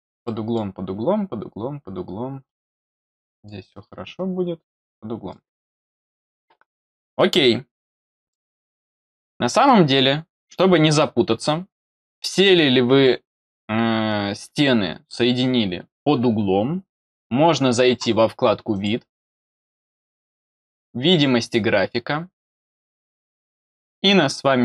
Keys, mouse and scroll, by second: 0.2 middle click, 3.1 middle click, 4.4 middle click, 8.2 middle click, 9.6 middle click, 18.7 click, 20.9 click.